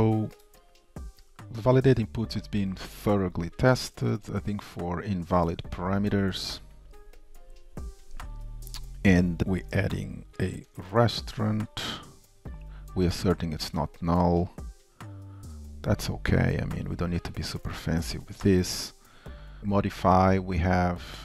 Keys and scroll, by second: 17.1 ctrl+shift+Up, 18.2 ctrl+shift+Down.